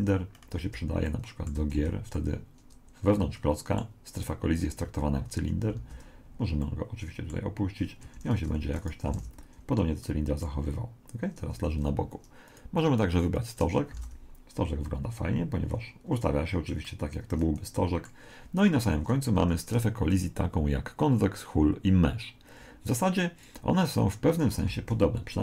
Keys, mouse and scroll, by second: 0.2-1.0 scroll up 2, 0.6 middle click, 1.0-3.8 middle drag, 1.8 z, 4.8-8.3 middle drag, 5.8 alt+a, 8.0 Escape, 8.5 r, 9.2 alt+a, 10.0-11.8 middle drag, 11.6 Escape, 12.5 click, 14.0 alt+a, 16.8-18.5 middle drag, 19.2-20.1 scroll down 1, 19.4 Escape, 20.1 click, 24.8 alt+a.